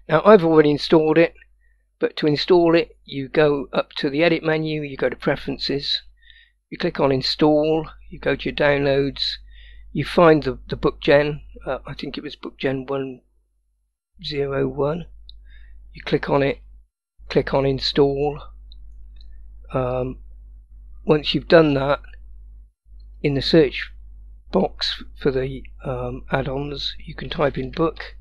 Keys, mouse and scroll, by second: 4.3-5.6 drag.